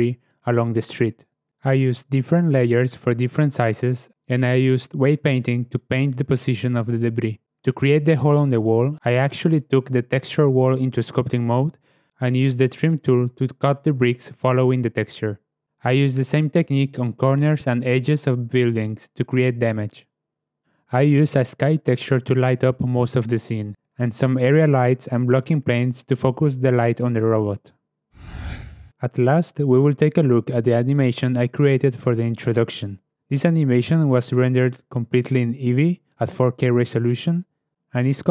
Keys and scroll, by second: 4.1 ctrl+z, 7.8 Tab, 8.2 1, 15.5 Tab, 16.0 /, 16.6 Tab.